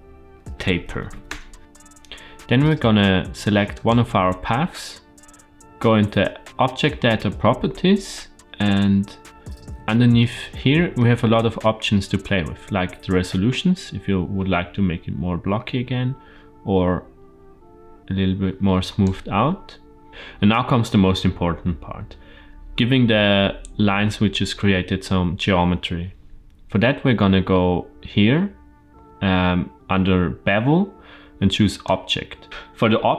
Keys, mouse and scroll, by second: 1.6 middle click, 3.6 click, 9.2-9.8 scroll up 2, 9.8 shift+middle drag, 10.4-10.8 middle drag, 12.1-19.0 drag, 20.1-20.5 scroll down 2, 27.4-30.9 scroll down 3, 31.6 click.